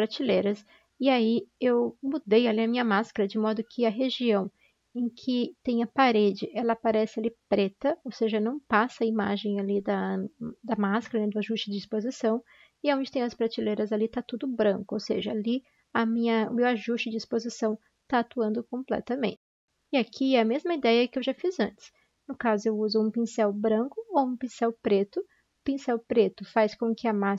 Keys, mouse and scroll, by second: 3.8 ctrl+shift+i, 4.4 ctrl+shift+i, 4.4 typing, 12.2 typing, 18.0 typing, 19.4-20.1 typing.